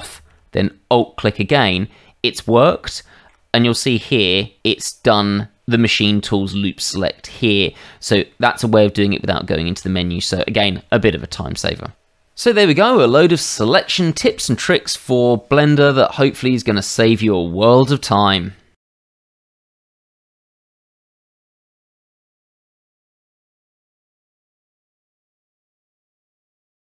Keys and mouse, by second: 0.9 alt+click, 2.3 middle click, 2.9 shift+middle click, 8.3 middle click.